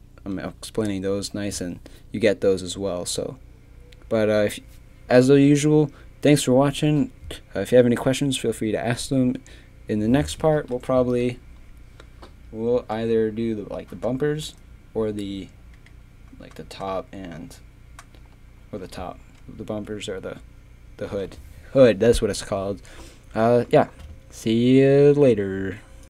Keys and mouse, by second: 10.6 KP_3, 15.8 click.